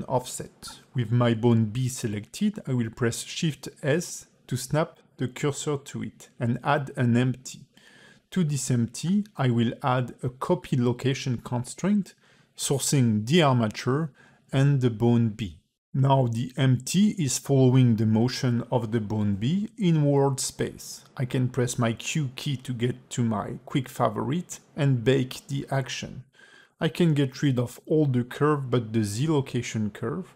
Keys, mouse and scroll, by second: 2.9 shift+s, 4.5 ctrl+Tab, 5.2 shift+a, 10.4 click, 11.1 click, 13.1 click, 15.3 click, 17.1 shift+middle click, 18.1 space, 20.9 space, 21.3 q, 24.9 scroll down 5, 25.9 click, 26.4 a, 26.6 a, 26.9 click, 27.6 x, 28.2 click, 28.4 x, 28.7 click, 28.7 x, 29.1 scroll down 3, 29.2 a.